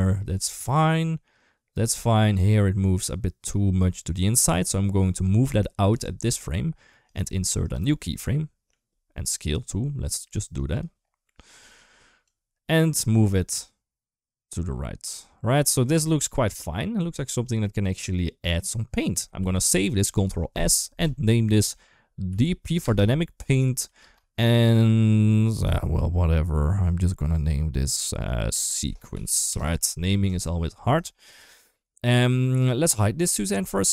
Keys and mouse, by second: 0.6-3.3 drag, 3.8-4.7 middle drag, 5.7 g, 7.5 right click, 8.1 middle click, 9.2 right click, 10.4 right click, 11.1 middle click, 12.1-18.8 drag, 19.3 ctrl+s, 30.9 shift+middle click, 32.7 click.